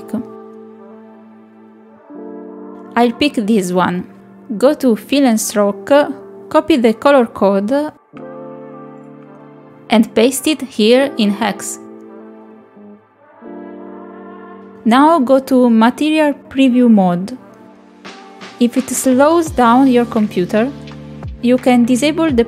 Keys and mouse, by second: 21.5-22.4 drag.